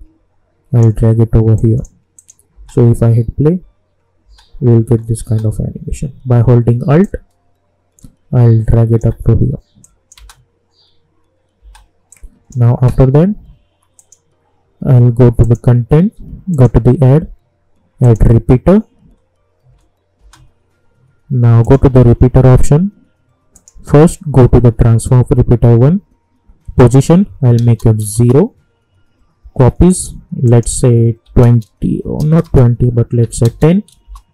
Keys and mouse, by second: 2.5 space, 7.0-9.8 alt+drag, 10.1 space, 12.1-13.9 drag, 19.7 space, 21.6 click, 26.7 click, 28.1 Return, 29.9 click, 34.0 Return.